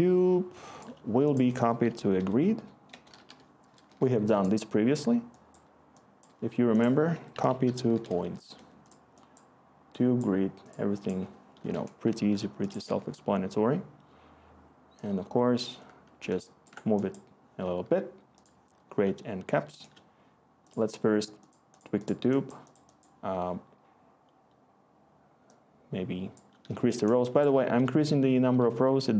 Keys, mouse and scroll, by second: 1.5 Tab, 1.6-2.3 typing, 2.9 Tab, 7.6-8.3 typing, 8.5 Return.